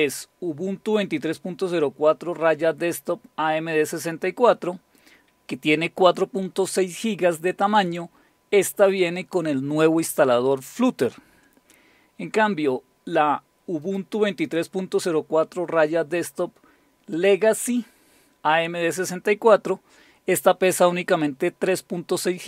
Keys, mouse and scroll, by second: 5.0 click, 13.8 click.